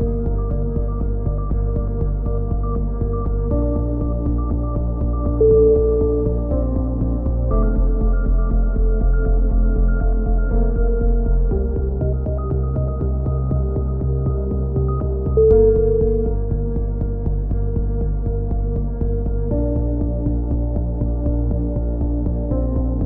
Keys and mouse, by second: 0.3 z, 0.8 z, 1.0 z, 1.6 click, 2.6-4.5 drag, 4.5 ctrl+KP_7, 4.9 z, 6.5 click, 9.9 a, 10.2 z, 10.5 click, 10.9 click, 11.4 z, 12.0-14.5 middle drag, 14.5 z, 16.0-18.4 drag, 18.4 ctrl+KP_7, 18.6 click, 18.8 middle click, 19.4 z, 19.7 c, 20.5-22.1 drag, 23.0 a.